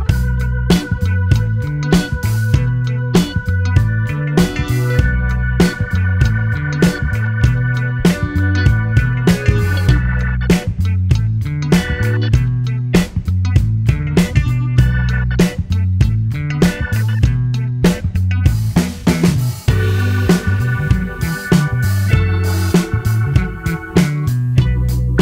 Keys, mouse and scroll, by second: 8.5 click, 9.0-10.6 middle drag, 10.6-11.3 scroll down 2, 11.3 shift+middle click, 12.0-12.7 scroll up 3, 12.7-14.2 middle drag, 14.2 click, 17.8 click, 18.1-19.7 middle drag, 19.7 click, 20.9 click, 21.9 click.